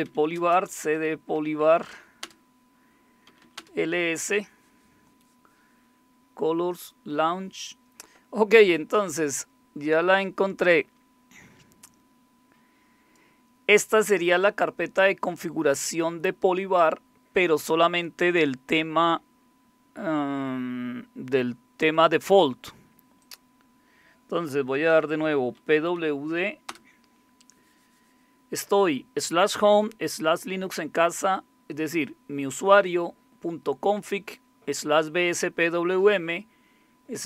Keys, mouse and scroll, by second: 0.0-1.3 typing, 1.6 Tab, 2.2 Return, 3.0-3.7 typing, 10.8-13.2 drag, 13.7 click, 24.9-25.9 typing, 26.7 Return.